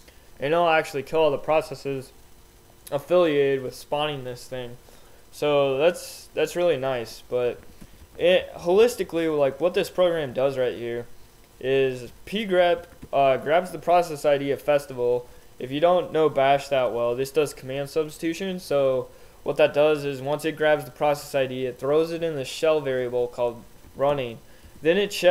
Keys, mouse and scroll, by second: 7.6 k, 10.2 k, 12.8 j, 13.0 h, 13.6 h, 15.3 h, 16.6 h, 23.8 j, 24.6 k.